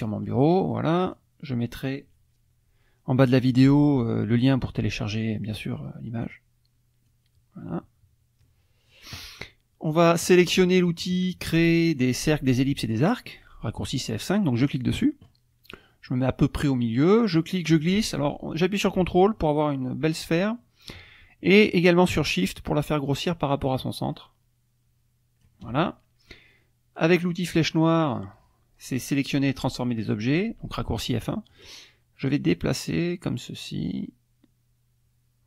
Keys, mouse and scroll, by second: 1.0 click, 6.2 click, 7.1-9.1 drag, 14.6 click, 17.2-25.6 drag, 31.5 click, 32.3-35.4 drag.